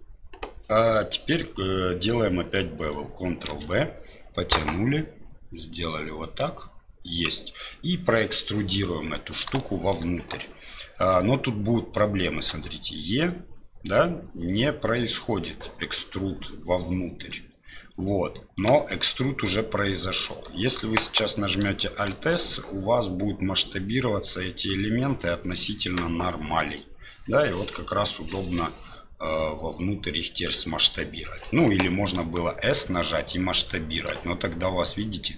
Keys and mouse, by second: 3.5 ctrl+b, 9.6 shift+right click, 12.5 e, 22.1 alt+s, 32.2 s.